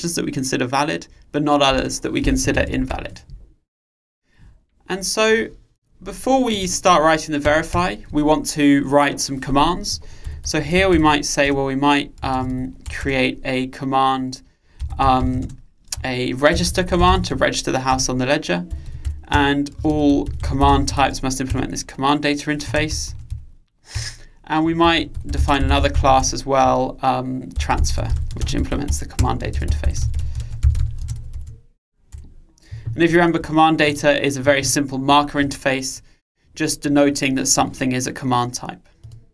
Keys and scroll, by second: 4.6 super+1, 21.3 Return, 31.2 Return, 36.1 super+b.